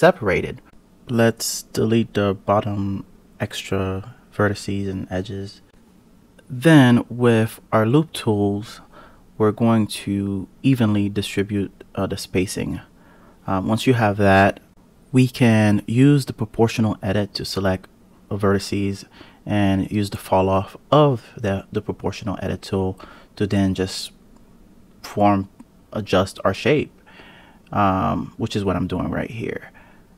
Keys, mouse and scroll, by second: 0.4 a, 0.6 KP_Decimal, 1.4-2.9 scroll up 1, 2.9-5.5 right drag, 5.6-6.5 scroll up 1, 6.5-7.5 scroll down 2, 7.5 click, 8.3 click, 8.9 click, 9.8 click, 11.0 g, 12.4 g, 18.0 click, 19.0 g, 21.0 click, 21.6 g, 25.6 click, 26.4 g.